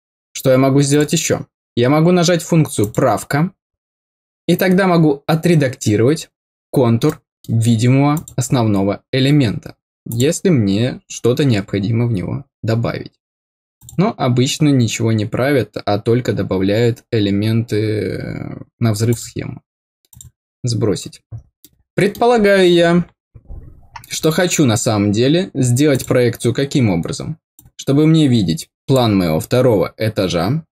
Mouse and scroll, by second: 0.8 click, 2.7 click, 7.0 middle click, 8.1 click, 10.0 click, 13.7 click, 19.0 click, 20.0 click, 21.5 middle click, 24.6 scroll down 1, 25.8 click, 27.5-28.9 drag.